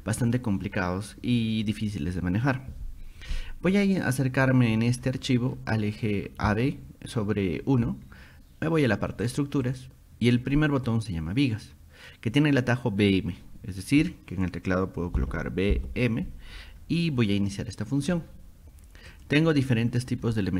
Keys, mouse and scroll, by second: 4.4-5.2 scroll up 6, 5.6 middle click, 6.0 scroll, 9.3 click, 9.7 click, 15.2 b, 15.8 m, 19.1 click, 20.2 scroll up 2.